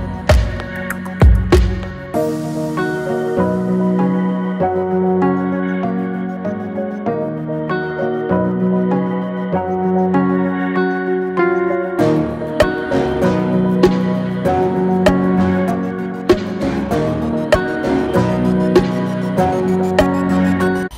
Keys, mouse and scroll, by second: 3.0 click, 4.8 click, 6.6 shift+drag, 7.5 shift+click, 8.0 shift+click, 9.3 ctrl+z, 9.6 ctrl+z, 10.7 shift+click, 11.6 shift+click, 13.1 g, 18.9 click, 20.8 ctrl+r.